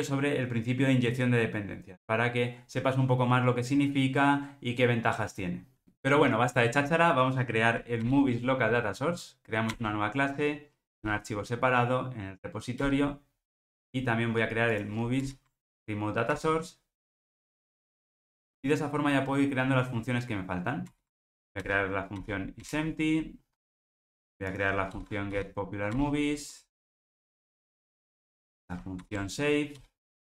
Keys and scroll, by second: 8.0 alt+Return, 13.9 alt+super+[, 15.2 alt+Return, 18.5 alt+super+[, 20.9 alt+Return, 26.7 alt+Return.